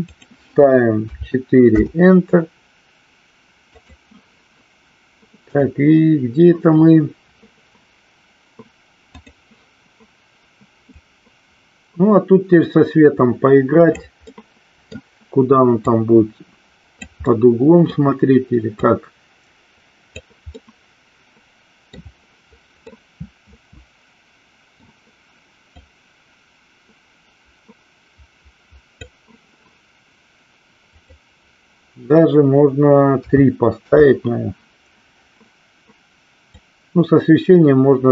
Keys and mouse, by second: 0.3-2.2 drag, 3.8-5.8 drag, 11.2-14.3 drag, 14.6 middle click, 15.9-17.2 drag, 17.6 middle click, 19.1-20.4 drag, 20.8-22.3 middle drag, 23.2-25.1 middle drag, 25.9-29.3 drag, 31.2-34.4 drag, 36.7-38.1 drag.